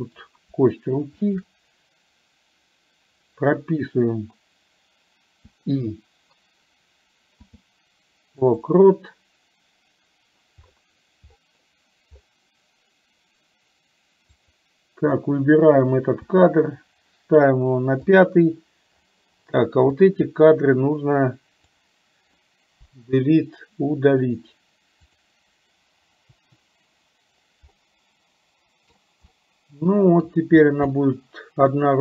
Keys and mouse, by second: 1.3 shift+click, 14.4 click, 20.1-21.8 drag, 22.9 Delete, 26.4 Delete, 27.8-29.1 middle drag, 29.4 middle click, 30.9-32.0 middle drag.